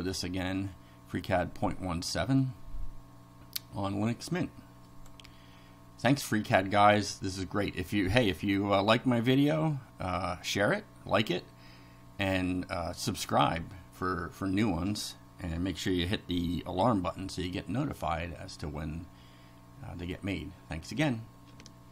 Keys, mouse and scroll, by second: 4.9 click.